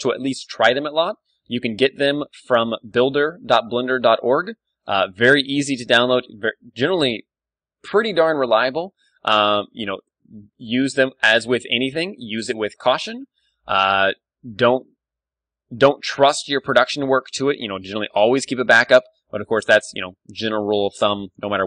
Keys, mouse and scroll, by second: 0.4 d, 0.4 middle click, 5.8-8.1 super+middle drag, 8.7-10.3 middle drag, 9.6 ctrl+r, 10.3-11.8 drag, 10.5 s, 11.9-13.6 drag, 13.0 ctrl+r, 14.7-16.5 drag, 15.5 ctrl+r, 16.8-18.0 drag, 17.1 ctrl+w, 18.0-20.3 middle drag, 18.4 a, 18.7 Tab, 19.3 Tab, 21.3 middle click.